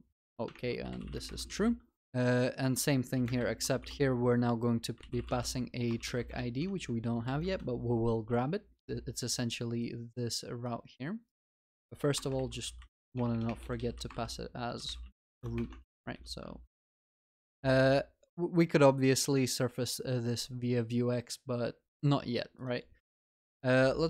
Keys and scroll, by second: 0.6 ctrl+BackSpace, 1.7 ctrl+s, 15.9 ctrl+s, 16.5 ctrl+s, 17.0 ctrl+alt+shift+l, 17.6 ctrl+s, 23.0 Tab.